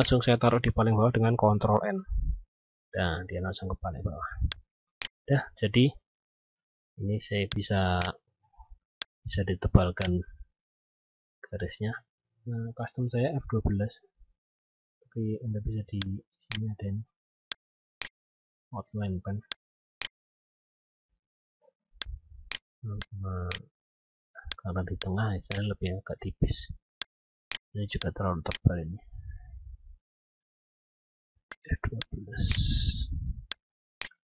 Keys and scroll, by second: 1.5 ctrl+End, 10.8 F12, 29.6 F12.